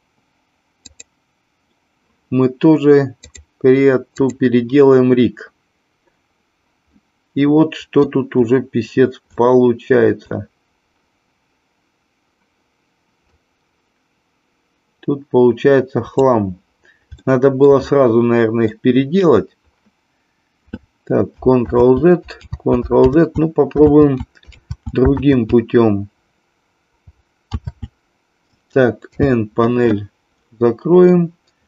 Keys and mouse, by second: 0.9 click, 3.3-5.6 drag, 7.0-8.1 middle drag, 9.4 shift+middle click, 13.3-16.3 drag, 17.3 shift+middle click, 17.8-18.7 middle drag, 22.0 ctrl+z, 22.7 ctrl+z, 23.3 ctrl+z, 24.0 ctrl+z, 24.8 ctrl+z, 25.4 ctrl+z, 27.7 ctrl+z, 29.0 n, 31.2-31.6 middle drag.